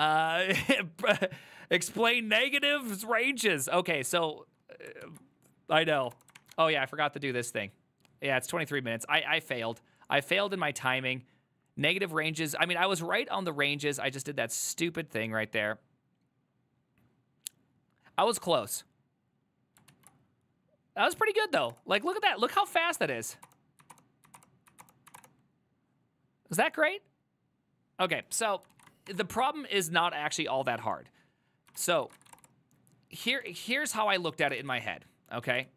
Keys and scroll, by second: 6.1 Up, 6.2 Return, 21.6 Up, 21.8 Return, 22.1 Up, 22.2 Return, 22.5 Up, 22.6 Return, 23.0 Up, 23.1 Return, 23.4 Up, 23.5 Return, 23.9 Up, 24.0 Return, 24.4 Up, 24.5 Return, 24.8 Up, 24.9 Return, 25.2 Up, 25.2 Return, 29.2 1, 31.9 ctrl+c, 32.0-32.9 typing, 33.4 alt++, 34.7 ctrl+t, 35.3-35.7 typing.